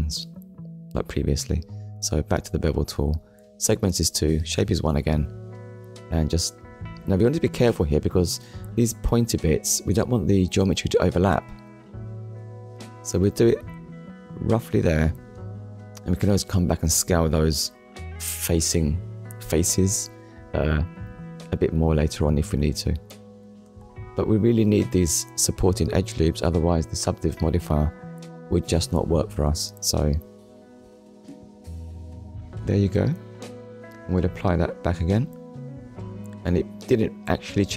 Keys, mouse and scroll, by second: 0.4-0.9 scroll up 1, 0.9 scroll down 1, 2.9 click, 7.2 middle click, 8.3 scroll up 1, 9.1-9.5 scroll up 1, 10.4 click, 18.6 scroll up 1, 20.2 scroll down 1, 20.9-21.3 scroll down 1, 21.5 middle click, 23.7 middle click, 25.4 scroll up 1, 26.2-26.6 scroll down 1, 26.7 middle click, 28.5-28.9 scroll down 1, 28.9 middle click, 31.3 Tab, 31.8 scroll down 1, 32.4 click, 32.7 middle click, 33.9 click, 35.5 click, 36.5 click, 37.0 middle click.